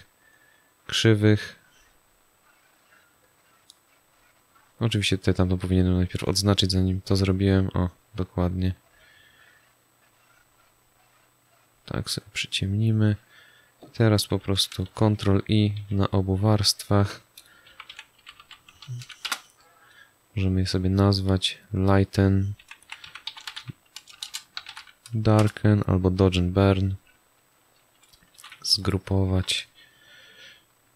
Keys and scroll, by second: 14.8 ctrl+i, 17.4-18.9 typing, 19.2 Return, 22.5-25.2 typing, 25.3 Return, 28.3 ctrl+g.